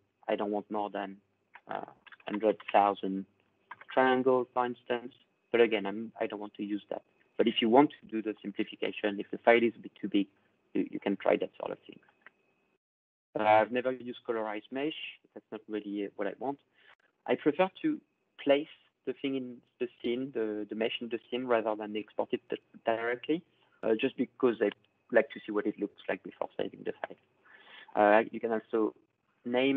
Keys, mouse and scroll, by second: 1.6-4.0 typing, 12.0-15.8 drag, 27.8 click, 29.1 click.